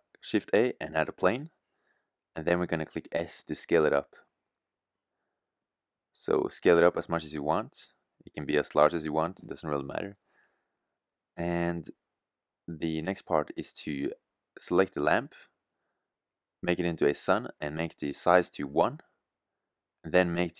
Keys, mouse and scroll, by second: 5.3 s, 7.8 middle click, 13.6 middle click, 14.8-18.1 middle drag, 18.4-20.5 middle drag.